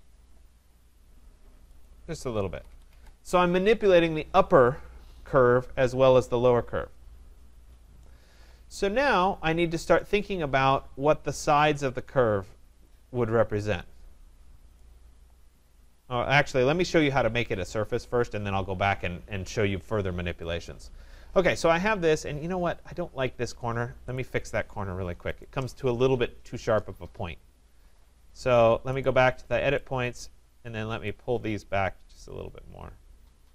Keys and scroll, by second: 2.5 Escape.